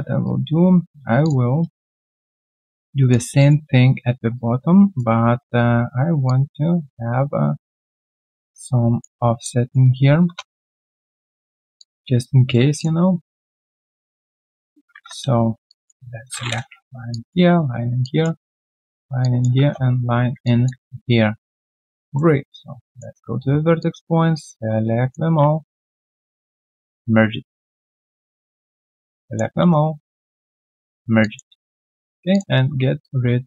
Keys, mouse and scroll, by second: 0.2 q, 1.4 Tab, 3.4 alt+right click, 4.3 shift+right click, 9.4 alt+click, 10.2 Return, 10.9 alt+click, 11.4 q, 11.8 alt+click, 12.2 right click, 13.2 right click, 17.4 Return, 20.4 alt+click, 20.7 alt+q, 21.0 right click, 23.2 Tab, 25.4 shift+right click, 28.1 Tab, 31.2 alt+click, 31.7 right click, 31.7 q, 33.0 shift+click.